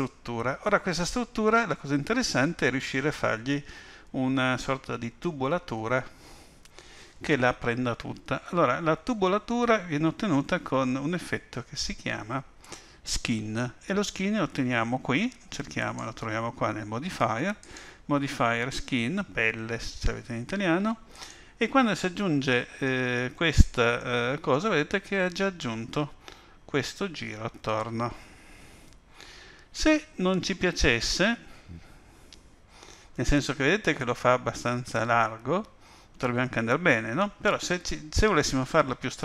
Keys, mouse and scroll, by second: 15.8 click, 17.6 click, 22.9-23.6 scroll up 3, 23.6-24.0 scroll down 2, 24.0 middle click.